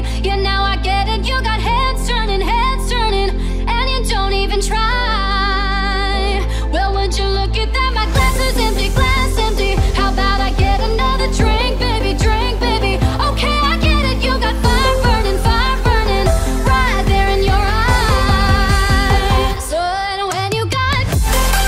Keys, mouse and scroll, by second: 0.2 click, 1.5 2, 2.3 Return, 2.7 0, 3.2 Return, 3.6 2, 4.3 Return, 4.6 0, 6.2-11.8 drag, 11.8 Left, 13.5 Down, 16.4 Right, 17.2 Left, 18.4 click, 20.4-20.8 typing.